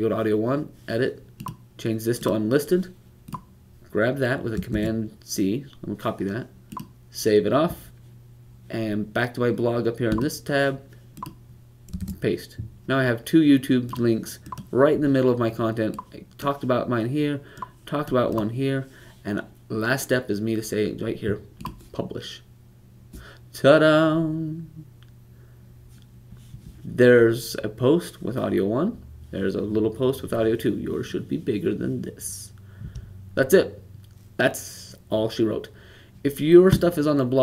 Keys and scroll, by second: 4.6 super+c, 11.9 super+v.